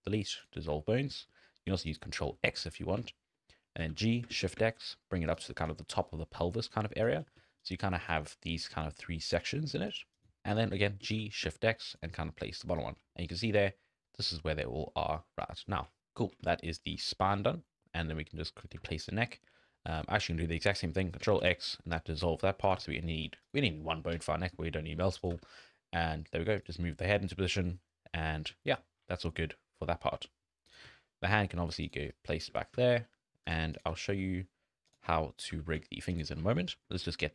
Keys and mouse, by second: 1.1 click, 1.9 click, 3.8 g, 5.6 d, 5.9-7.0 drag, 7.0 d, 7.1 d, 7.4 d, 7.6 click, 8.1 d, 10.4 n, 10.5 click, 10.7 g, 12.2 click, 13.1 shift+click, 14.6 middle click, 15.7 shift+middle click, 16.5 shift+middle click, 17.1 shift+middle click, 17.5 middle click, 18.0 shift+middle click, 18.6 click, 18.8 g, 21.4 ctrl+x, 22.6 click, 22.8 g, 24.6 shift+click, 25.2 click, 25.3 g, 26.9-27.4 middle drag, 27.6 middle click, 28.3 click, 29.1 shift+click, 30.8 g, 33.8 click, 33.9 g, 35.4 click, 35.5 g, 36.9 shift+click.